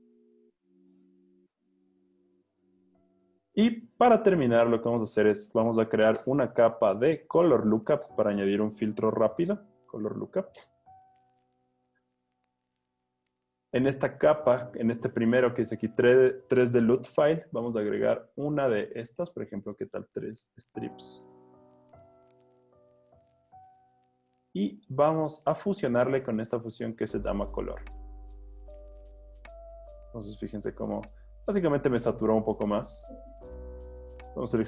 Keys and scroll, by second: 3.7 z, 15.3 ⟲.